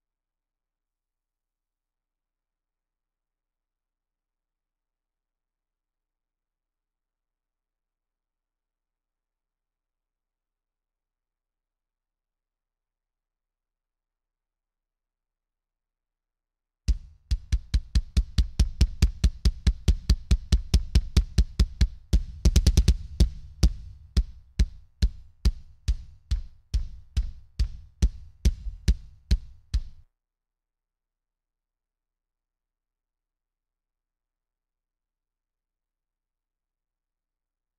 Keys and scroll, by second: 7.2 space, 8.0 space, 15.2 space, 23.6 Escape, 24.2 Escape, 30.1 space.